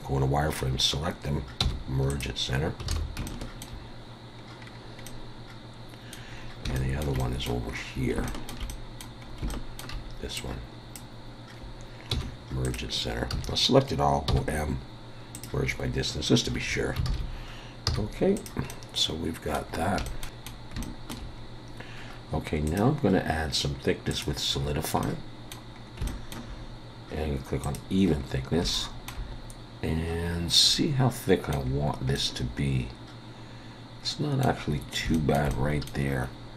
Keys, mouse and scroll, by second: 1.6 m, 2.5-2.9 scroll down 3, 2.9 alt+a, 3.2 shift+middle click, 4.5-5.0 scroll down 3, 5.0 middle click, 6.3 scroll down 2, 6.7 shift+middle click, 7.2 middle click, 7.7 scroll up 3, 8.2 shift+middle click, 8.7 middle click, 9.2 scroll up 2, 9.5 shift+middle click, 10.3 click, 12.1 m, 13.3 a, 14.3 m, 16.6 scroll down 1, 17.1 alt+a, 17.8 z, 18.7 middle click, 19.7 scroll down 2, 20.0 shift+middle click, 20.3 middle click, 20.8 shift+middle click, 21.4 scroll down 1, 22.7 click, 25.0 middle click, 25.8 scroll up 2, 26.1 shift+middle click, 27.6 click, 28.2 scroll up 1, 28.7 shift+middle click, 30.2 scroll down 3, 30.7 middle click, 31.7 scroll down 2, 32.1 middle click, 34.7 scroll up 2, 35.1 shift+middle click, 35.5 middle click.